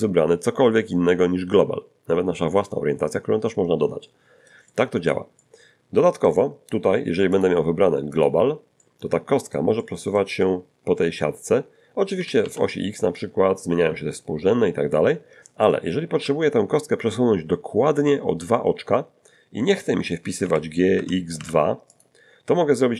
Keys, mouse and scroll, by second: 4.0-5.3 middle drag, 5.3-6.4 middle drag, 7.3 click, 8.1 click, 8.8 middle click, 9.8 middle click, 12.2 g, 12.4 x, 16.1 Escape, 20.4 g, 20.9 x, 21.4 2, 21.9 click.